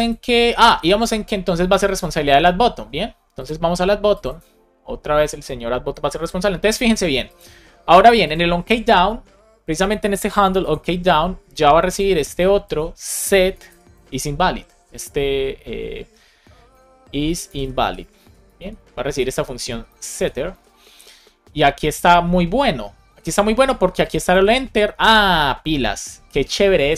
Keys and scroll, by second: 13.2 Return, 13.9 shift+i, 17.3 shift+i, 18.5 alt+shift+Left, 19.0 Right, 19.8 Left, 20.4 super+c.